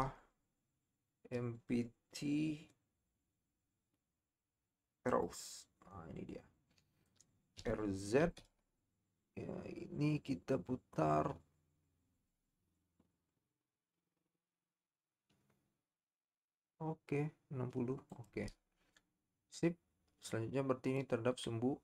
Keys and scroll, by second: 7.8 r, 8.2 z.